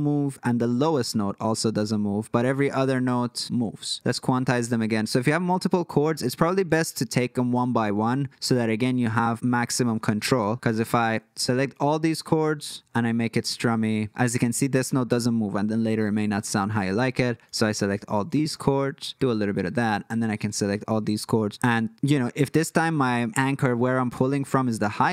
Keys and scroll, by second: 2.7 super+z, 3.9 super+z, 10.2 super+z, 16.0 super+z.